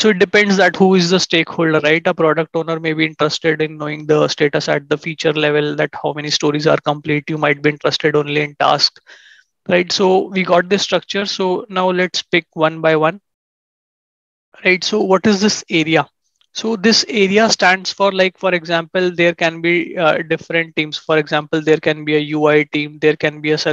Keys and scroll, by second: 18.1 ctrl+shift+#.